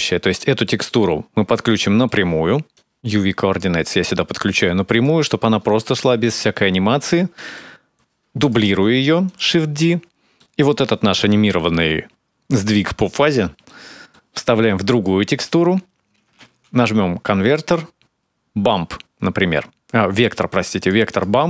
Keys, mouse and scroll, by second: 0.1 middle click, 0.8 click, 1.3 click, 2.4 click, 3.8 click, 5.5 space, 6.0 space, 6.3 middle click, 8.2 click, 8.5 shift+d, 9.4-11.1 scroll up 6, 10.2 middle click, 11.1 middle click, 12.2 click, 13.5 middle click, 14.7 click, 15.6-16.1 scroll up 3, 16.2 shift+a, 21.3 middle click, 21.3 scroll up 3.